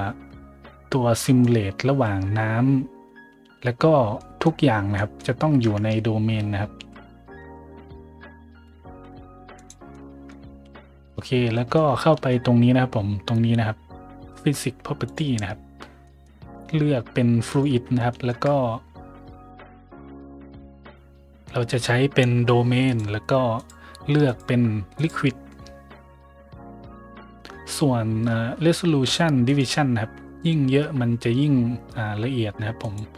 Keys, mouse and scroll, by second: 1.1 middle drag, 4.1 middle drag, 4.9 middle drag, 5.6 `, 6.7 s, 7.3 y, 8.5 x, 9.5 click, 9.9-10.2 middle drag, 10.8 middle click, 11.5 middle click, 12.0 shift+middle drag, 15.0 click, 16.0 middle drag, 17.4 click, 17.4 right click, 18.0 shift+middle drag, 19.7 click, 19.7 right click, 20.9 middle click, 22.8 click, 23.5 click, 24.2 click, 24.9 click, 25.9 middle click, 29.4 click, 32.1 middle click, 32.7 click.